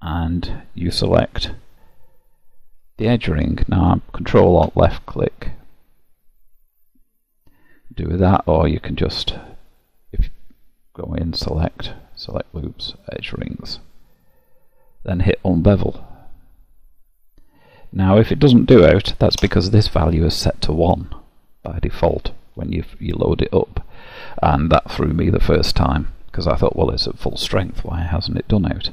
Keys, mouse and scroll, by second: 3.9 ctrl+alt+click, 9.7 click, 10.9 click, 15.5 click, 17.5 click, 21.7 middle click.